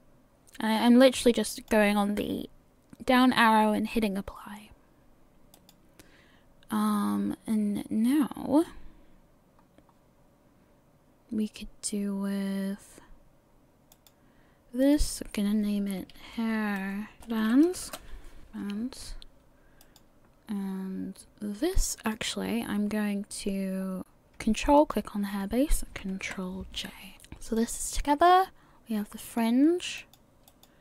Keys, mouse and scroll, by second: 1.5 click, 5.6 click, 9.6-12.6 scroll up 1, 13.9 click, 14.8 click, 15.1 click, 18.4 click, 19.8 click, 22.1 click, 22.8 scroll down 2, 24.8 ctrl+click, 26.2 ctrl+j, 27.1 click, 27.6 click, 30.0 click, 30.5 click.